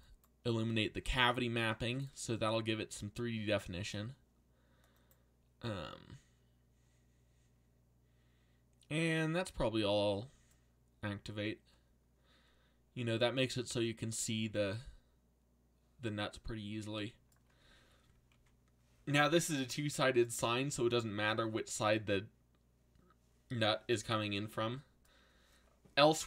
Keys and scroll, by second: 1.8 alt+a.